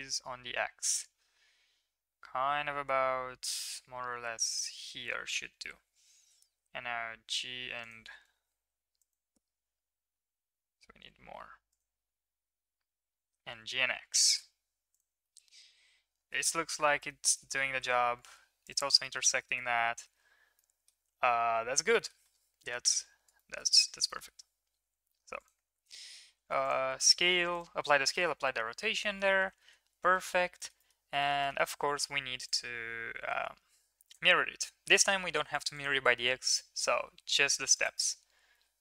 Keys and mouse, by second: 5.4 Tab, 6.1 g, 8.1 Tab, 9.1 click, 10.0 g, 12.0 Tab, 13.0 g, 15.2 middle drag, 16.5 shift+drag, 16.5 shift+middle drag, 16.5 shift+right drag, 17.2 shift+drag, 17.2 shift+middle drag, 17.2 shift+right drag, 18.6 click, 19.2 middle click, 19.7 shift+middle drag, 20.5 middle click, 21.9 middle drag, 23.3 shift+middle click, 24.2 shift+middle click, 25.6 ctrl+s, 26.2 ctrl+a, 27.0 ctrl+a, 28.1 middle click, 29.6 ctrl+s, 30.1 middle click, 30.5-30.9 shift+middle drag, 31.2 shift+middle click, 31.4-32.5 middle drag, 32.5-34.1 drag, 35.5 click, 35.7 click, 36.5-38.8 drag.